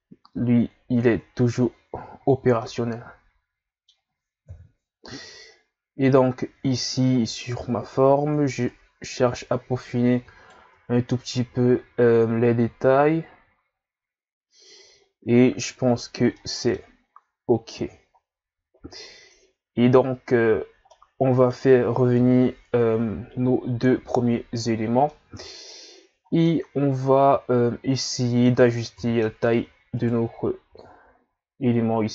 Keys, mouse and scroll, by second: 1.4 a, 1.7 scroll down 1, 1.9 a, 2.3-2.6 scroll down 1, 2.6-4.4 middle drag, 4.4 KP_1, 5.6 scroll up 1, 6.3-6.6 scroll up 2, 6.6 Tab, 7.9 Tab, 8.2 Tab, 8.7 right click, 10.7 Tab, 15.1-15.8 scroll down 1, 15.8-16.3 scroll up 3, 16.3 middle click, 17.2-18.2 scroll up 1, 18.2-19.1 scroll down 1, 19.1-20.4 scroll down 1, 20.4-20.9 scroll down 4, 20.9-22.2 middle drag, 22.2 KP_Divide, 23.5-24.4 scroll down 2, 25.1-26.3 middle drag, 26.3 scroll down 1, 26.4-29.0 middle drag, 29.0 KP_3, 30.0 right click, 30.6 s.